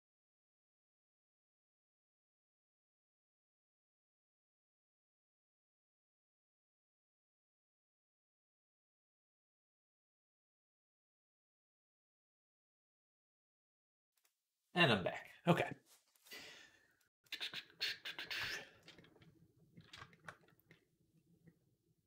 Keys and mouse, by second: 16.8 click, 20.5 middle click, 21.9-22.0 middle drag.